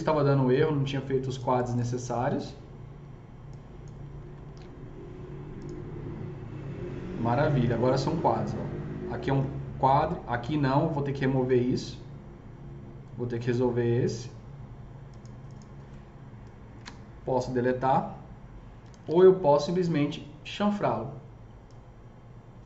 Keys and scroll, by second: 4.4 ctrl+shift+e, 16.6 ctrl+BackSpace, 19.0 ctrl+z.